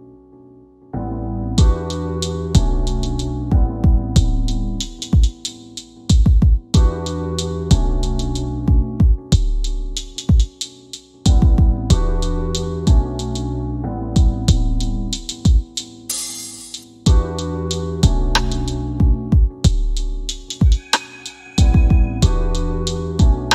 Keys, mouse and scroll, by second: 1.3 middle click, 4.0 w, 4.7-8.9 drag, 7.1 middle click, 9.9 click, 10.7 middle click, 11.8 w, 12.1 w, 12.6 scroll up 1, 13.3 middle click, 14.1 e, 15.2 click, 16.4 w, 17.3 click, 21.0 click.